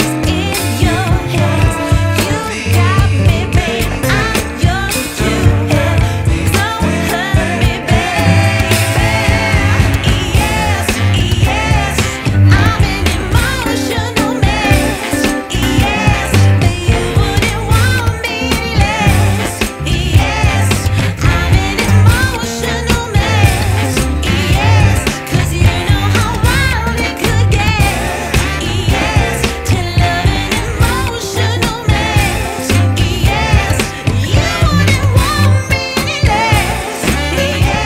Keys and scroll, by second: 1.3 space, 3.7 F2, 26.5 3, 26.9 Return, 31.9 shift+Page_Up, 35.0 ctrl+r, 35.8 F4, 37.0 ctrl+r, 37.6 Escape.